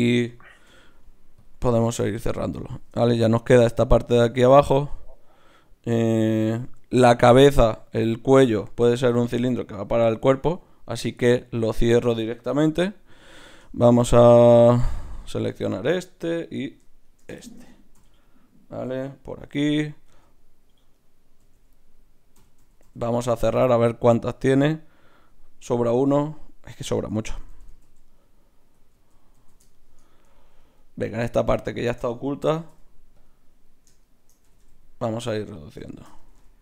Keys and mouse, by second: 0.7 n, 1.4-4.3 drag, 1.7 n, 4.3-8.0 right drag, 8.0-16.3 middle drag, 17.0-18.7 right drag, 18.0 f, 20.1 z, 20.9-22.8 right drag, 21.4-23.2 typing, 27.1 ctrl+z, 27.3 ctrl+z, 27.5 ctrl+z, 27.7 ctrl+z, 28.9 ctrl+z, 29.3 ctrl+z, 31.1-32.8 drag, 32.5 g, 34.4 g, 36.2 g.